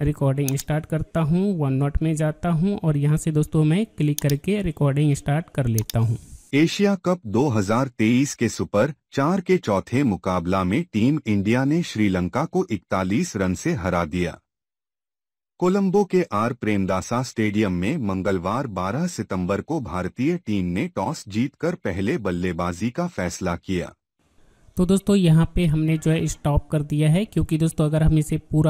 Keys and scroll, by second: 0.0 alt+Tab, 2.0 alt+Tab.